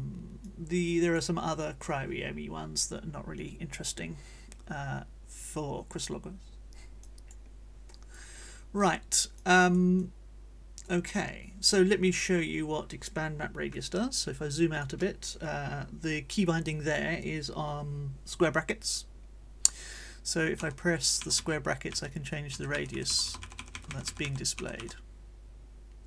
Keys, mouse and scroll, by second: 0.4 click, 7.0 click, 8.1 click, 9.4 click, 12.0 middle click, 12.5 scroll up 1, 20.6 [, 21.2 ], 22.5 [, 23.4 ], 24.5 [.